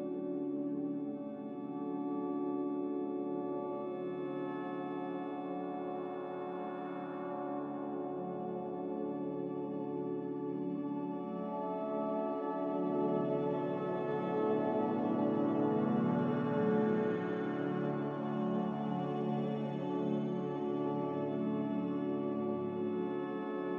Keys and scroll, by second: 7.5 \, 16.2 typing.